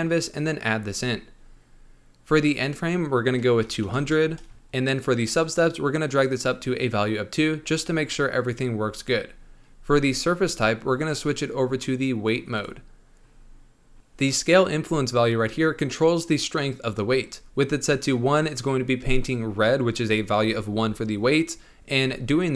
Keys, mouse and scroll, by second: 1.3-2.4 scroll down 4, 2.4-4.5 drag, 4.5-6.1 scroll down 2, 6.1-8.7 drag, 8.7-9.6 scroll up 2, 9.7-10.4 scroll down 4, 10.4-13.1 drag, 13.1-13.9 scroll down 3.